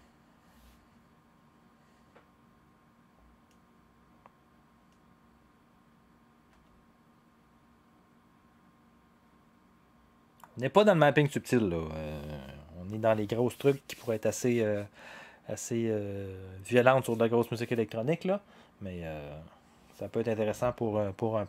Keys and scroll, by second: 6.5 0.